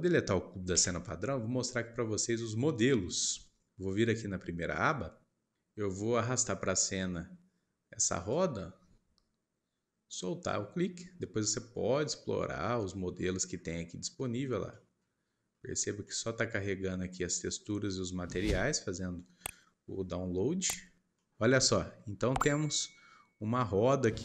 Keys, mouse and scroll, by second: 4.7 click, 13.5-14.2 scroll up 6, 14.7-15.7 middle drag, 15.7 scroll down 1, 16.0-21.7 middle drag, 21.7-22.4 scroll up 4, 22.4-23.6 middle drag, 23.6-24.0 scroll down 3, 24.0-24.2 middle drag.